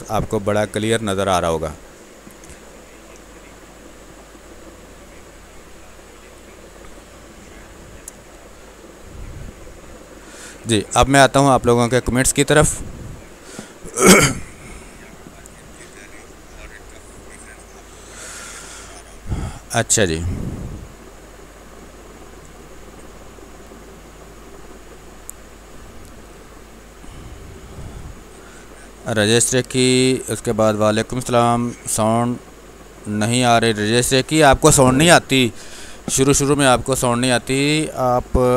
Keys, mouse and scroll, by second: 2.5 space, 3.0 ctrl+click, 4.0 click, 5.1-8.7 drag, 8.7-13.2 drag, 13.2 ctrl+s.